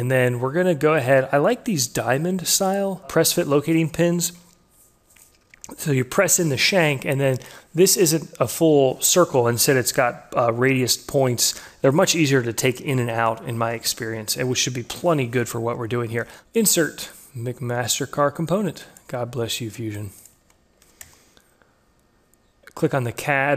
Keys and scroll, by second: 3.0 alt+F4, 16.0 alt+Tab, 20.3 ctrl+v, 21.4 Return.